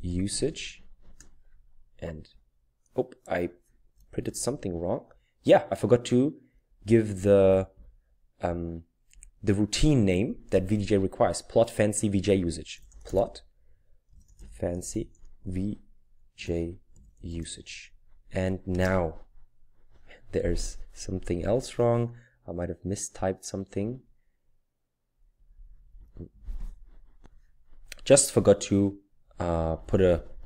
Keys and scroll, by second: 0.0-0.8 typing, 1.1 Return, 4.0 Down, 4.3 Up, 5.1 Left, 5.6-6.1 typing, 12.5-18.0 typing, 18.7 Return, 21.3 Up, 22.3 Left, 22.8 Left, 22.9 Left, 23.0 typing, 23.7 Left, 24.4 Left, 28.3 Left, 28.8-30.4 typing.